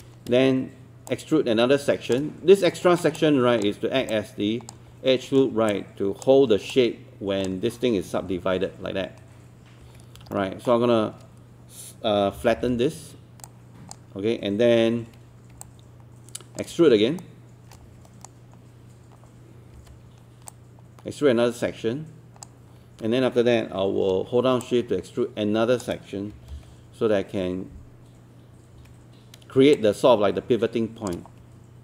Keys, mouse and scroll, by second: 1.1 shift+click, 2.7-3.0 scroll up 1, 3.2 super+click, 4.1 super+click, 5.7 super+click, 6.7 super+click, 8.2 super+3, 9.8 1, 10.3 super+middle click, 12.4 r, 13.5 click, 15.7 alt+click, 17.2 shift+right click, 19.8 w, 20.5-23.2 drag, 24.6 shift+click, 26.3 shift+e, 28.8 w, 29.8 shift+click.